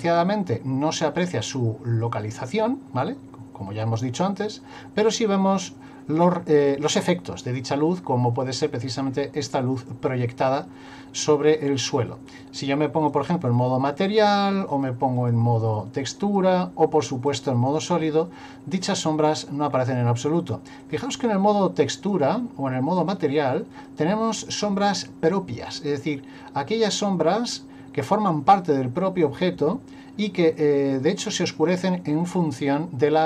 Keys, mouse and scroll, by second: 12.3 click, 14.7 click, 15.1 click, 17.3 click, 20.8 click, 23.0 click.